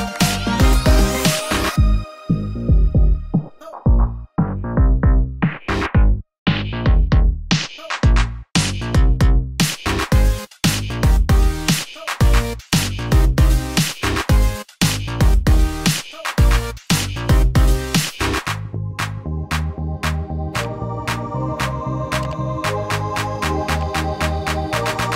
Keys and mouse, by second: 7.5-9.9 shift+middle drag, 10.4 Tab, 10.9-13.3 middle drag, 15.5 shift+click, 15.5 shift+right click, 19.1 Tab, 19.8-22.4 drag, 19.8-20.9 middle drag, 19.8-22.2 right drag, 20.2 Tab, 21.4 middle click, 22.0 2, 22.4-25.1 right drag, 23.8-25.1 typing.